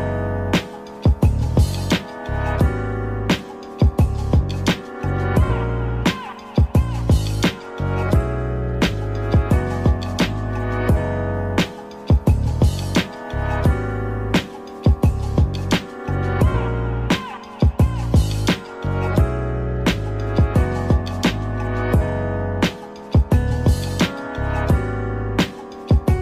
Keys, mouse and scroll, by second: 2.9-5.5 drag, 6.5-12.0 drag, 13.4 click, 14.7-20.2 drag, 20.2 scroll down 3, 20.7-22.6 middle drag, 22.6 click, 24.6-25.9 scroll down 3, 25.9 scroll down 1, 26.0-26.2 drag.